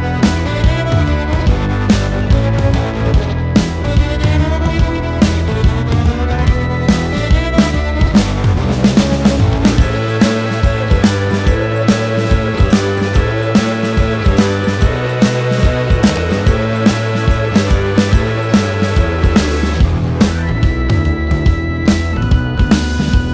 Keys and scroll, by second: 0.9 q, 12.3 m, 15.3 g, 16.4 q, 22.7 space.